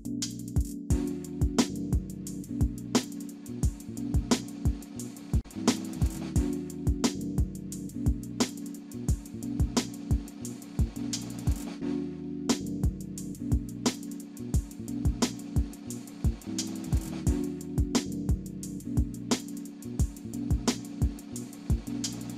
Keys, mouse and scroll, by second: 1.8-2.2 scroll down 1, 2.2 middle click, 3.1 middle click, 3.1-3.4 scroll up 1, 3.4 middle click, 5.5-6.1 scroll up 1, 6.1 middle click, 6.6 scroll down 1, 7.0-8.0 scroll up 1, 12.3 scroll down 1, 12.7 alt+click, 14.6 alt+middle click, 16.4 alt+middle click, 17.3 alt+click, 17.9 alt+middle click, 19.2 ctrl+click, 21.8 alt+middle click, 22.2 alt+middle click.